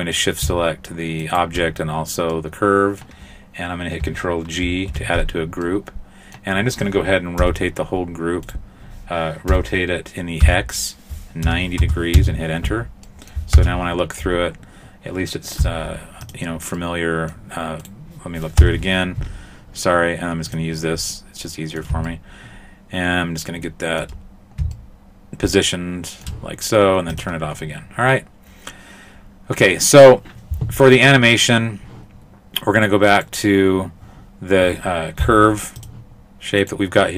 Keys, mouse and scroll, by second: 1.2 shift+right click, 1.8 scroll down 3, 2.3 middle click, 4.7 ctrl+g, 5.7 middle click, 7.4 r, 9.5 r, 13.1 middle click, 13.5 KP_0, 14.9-15.6 scroll up 1, 15.6 z, 16.8 middle click, 17.8 right click, 18.6 KP_0, 20.5 click, 21.1 middle click, 22.1 shift+middle click, 24.3-24.6 scroll down 1, 24.7 shift+middle click, 27.2 click, 28.1-29.3 scroll up 2, 29.3-30.3 scroll up 1, 33.1 right click, 35.2 z.